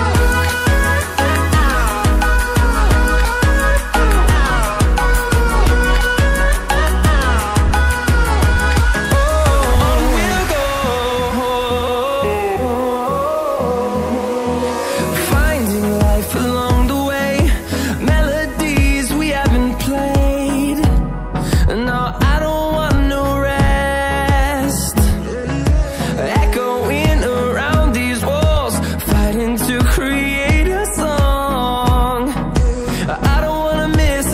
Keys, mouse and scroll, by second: 0.0-0.3 scroll down 1, 1.5 scroll up 1, 3.5 click, 5.7 click, 8.0 click, 8.6 scroll down 1, 11.1 click, 14.5-15.2 scroll down 1, 15.2-15.6 scroll up 1, 15.9-16.3 scroll down 1, 18.3 click, 20.4 click, 20.6 Return, 26.0 click, 26.4 scroll up 1, 26.8 click, 30.0-30.4 scroll down 1, 33.5 click.